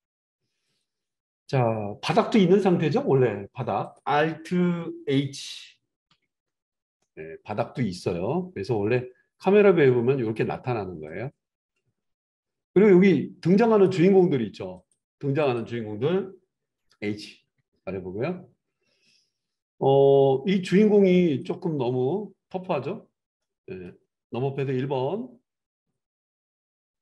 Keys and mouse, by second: 0.6 click, 3.8 click, 3.9-11.0 middle drag, 6.2 alt+h, 11.0-14.9 drag, 14.9 middle click, 15.4 click, 15.6-27.0 middle drag, 17.4 h, 24.6 KP_1.